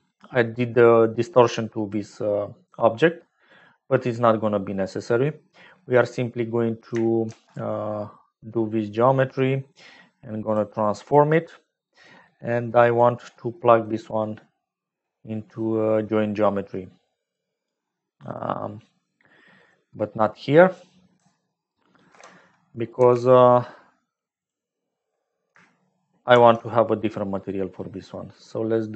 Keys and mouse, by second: 5.0 middle click, 7.2 shift+a, 12.0-13.5 drag, 13.6 middle click, 15.3 middle click, 17.3 click, 18.4-20.7 drag, 22.1 alt+p, 22.9 g, 24.9 click, 26.3 shift+a.